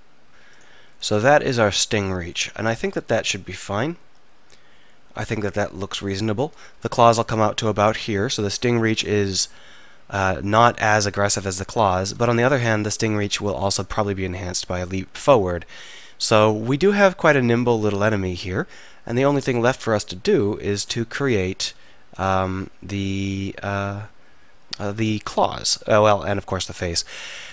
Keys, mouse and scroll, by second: 3.0 z, 3.5 z, 22.5 r.